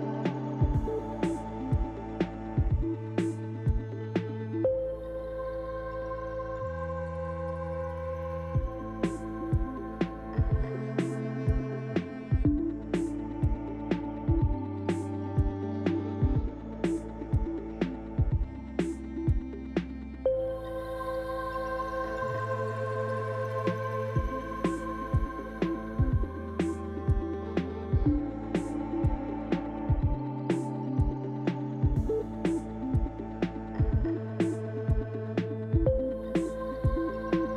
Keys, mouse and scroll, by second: 1.8 click, 2.2 middle click, 3.8-4.3 scroll down 2, 4.3 shift+middle click, 5.4 click, 6.6 shift+click, 8.1 ctrl+l, 9.7 click, 10.6 KP_Decimal, 12.3 Tab, 12.7 click, 13.8 l, 16.0 click, 17.0 click, 17.7 click, 18.2 click, 19.2 l, 20.7 click, 21.5 click, 22.0 Tab, 22.5 middle click, 24.1 middle click, 27.3 g, 29.9-30.4 scroll down 2, 30.4 middle click, 31.3-31.8 scroll down 2, 31.8 middle click, 32.4 scroll down 2, 33.4 click, 33.4 scroll down 1, 34.8 shift+click, 36.9 ctrl+l.